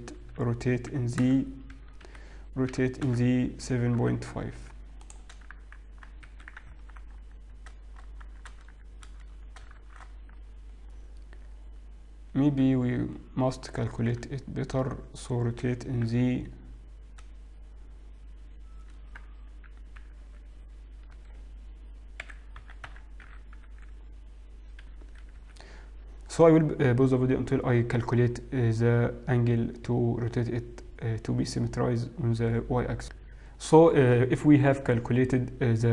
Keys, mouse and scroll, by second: 0.9 r, 2.8 r, 7.0 Tab, 7.0 z, 7.3-7.6 scroll up 3, 8.3-8.6 scroll down 3, 9.5 a, 9.8 shift+z, 11.0 scroll up 1, 11.7-12.3 scroll up 1, 15.6 r, 22.4 r, 33.5 click, 33.5 shift+middle click, 33.5 KP_3.